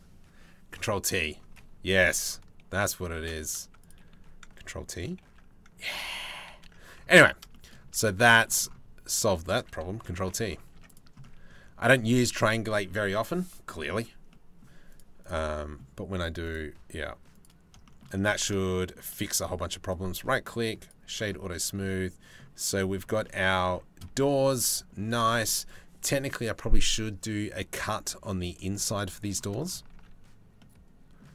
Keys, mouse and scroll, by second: 2.7 ctrl+t, 4.9 ctrl+t, 5.7 ctrl+z, 6.1 ctrl+z, 6.8 Tab, 7.2 shift+middle click, 7.5 Tab, 8.7 click, 9.8 ctrl+t, 10.4 Tab, 10.9 click, 11.5 middle click, 13.9 middle click, 14.5 click, 14.8 click, 16.2 click, 17.5 shift+click, 18.3 shift+click, 19.5-21.5 drag, 21.5-23.3 middle drag, 23.8 shift+middle click, 24.2 middle click, 24.5 click, 27.7-29.0 drag, 30.0 ctrl+s.